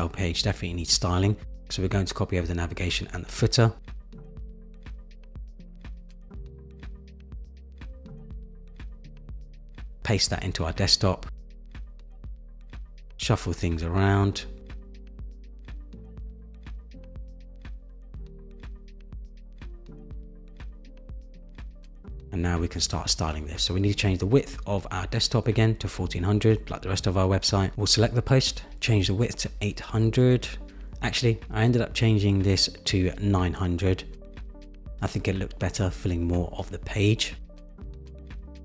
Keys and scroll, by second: 6.8 super+c, 12.7 super+v, 20.5 Return, 20.9 Return, 22.3 Right, 23.4 Left, 24.5 Return, 26.6 super+-, 29.4 Return, 30.8 super+=, 33.2 shift+Up.